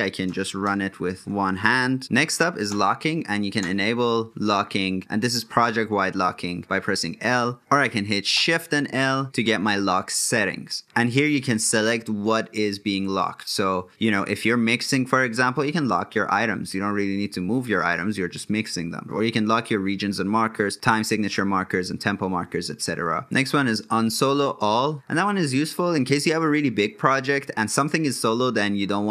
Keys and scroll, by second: 2.0 l.